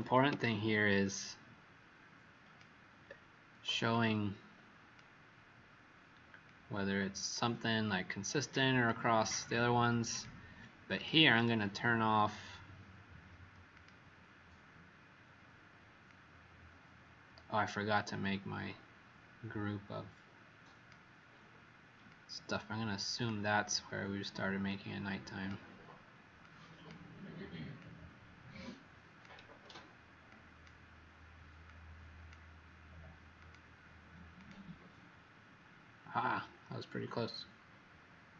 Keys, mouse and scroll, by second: 0.3 ctrl+click, 3.9 click, 6.4 shift+click, 8.2 click, 10.0 click, 11.3 right click, 13.7 click.